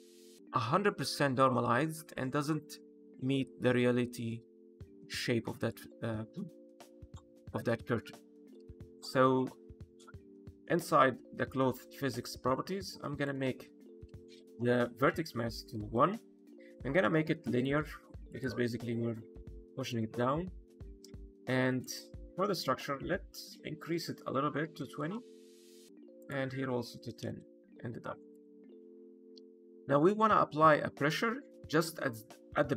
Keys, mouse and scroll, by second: 3.5 middle click, 5.5 click, 13.1 click, 17.3 click, 19.8 click, 20.4-21.6 scroll down 4, 21.6 click, 26.1 click, 28.2 click, 28.5-30.9 scroll down 4, 30.9 click.